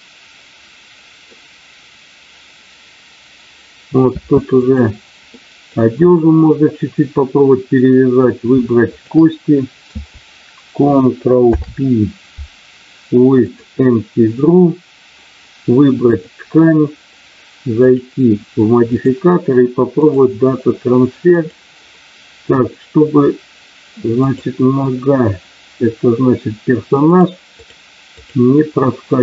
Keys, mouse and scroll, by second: 4.1 space, 4.5 click, 5.3 middle click, 8.9 shift+click, 11.4 ctrl+p, 16.1 click, 18.8-20.2 drag, 21.3 click, 27.0 click, 27.5 click.